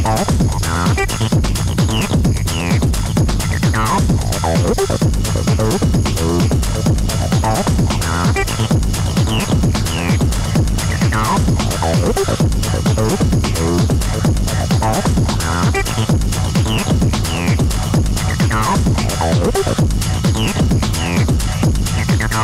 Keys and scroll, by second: 2.0 ctrl+d, 2.3 Escape, 6.1 ctrl+d, 6.4 Escape, 12.2 ctrl+d, 12.4 Escape.